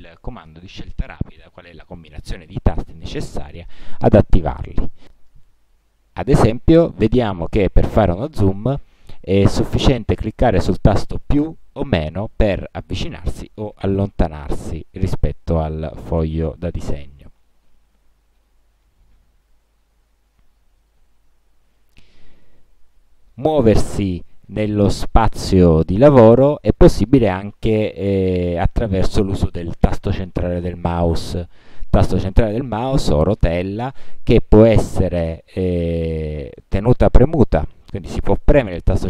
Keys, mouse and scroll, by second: 6.1 click, 7.0 click, 17.0 click, 18.5 KP_Add, 19.9 KP_Subtract, 21.1 KP_Add.